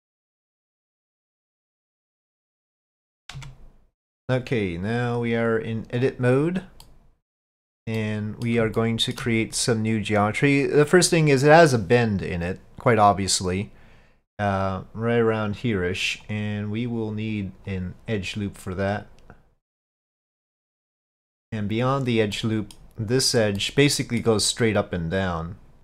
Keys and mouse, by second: 1.0-2.8 drag, 3.4 Tab, 4.0 click, 5.4-6.7 drag, 6.9 middle click, 8.0 middle click, 8.8 shift+middle click, 16.3 click, 17.7 click, 19.1-20.9 drag, 22.0 click, 22.4 middle click, 23.2 click, 23.6 middle click, 24.9-25.8 drag.